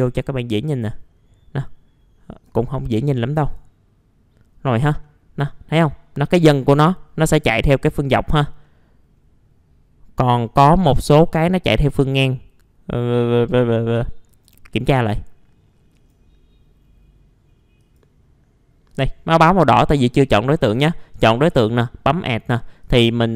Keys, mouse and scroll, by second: 1.1-2.4 scroll up 1, 2.4-3.7 drag, 4.5-5.0 scroll down 1, 5.0 middle click, 5.4-6.4 scroll up 1, 6.4-9.1 middle drag, 9.1-11.5 scroll up 1, 12.0 scroll down 1, 14.3 right click, 15.9 click.